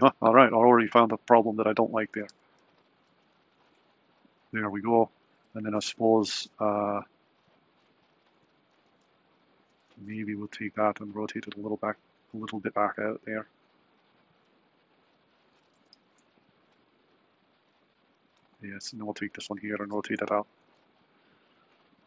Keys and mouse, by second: 0.0 ctrl+space, 1.1 click, 2.3 r, 5.1 drag, 9.4 click, 10.1 r, 15.4 click, 15.9 r, 19.3 click, 19.9 r.